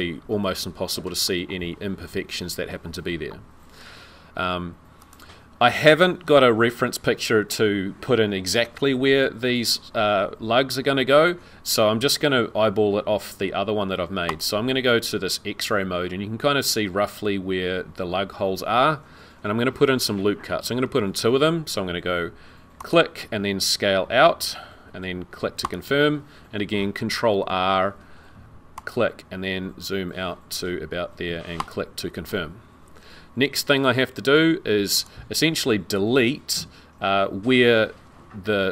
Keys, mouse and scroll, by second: 0.4 middle click, 1.8-2.4 scroll up 2, 5.0 click, 6.7-7.2 scroll up 3, 14.3 click, 20.7 ctrl+r, 27.3 ctrl+r, 34.4 2, 35.0 click.